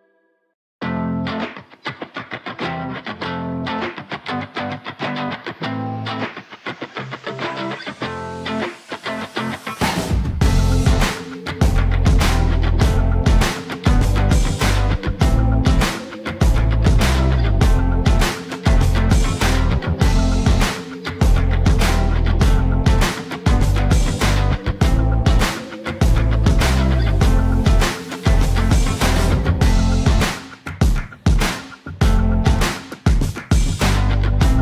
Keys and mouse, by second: 0.2 z, 1.0 click, 1.4 s, 2.9 g, 3.2 z, 4.0 click, 4.5 e, 5.3 z, 6.3 click, 6.5 s, 8.0 click, 8.7 e, 9.4 z, 11.3 shift+click, 12.5 shift+z, 13.0 click, 14.0-15.2 drag, 15.9 s, 17.9 s, 18.3 shift+z, 20.8 click, 21.7 click, 22.7 g, 23.0 z, 23.9 click, 24.4 shift+middle click, 25.2 e, 25.5 z, 26.8 s, 28.8 shift+middle click, 29.4 e, 30.4 z, 31.1 s, 32.3 click, 32.9 e, 33.5 z, 34.0 click, 34.4 s.